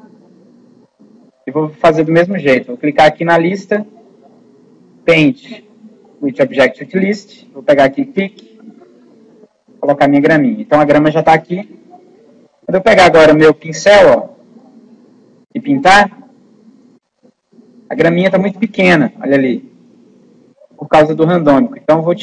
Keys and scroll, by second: 20.4 ctrl+z.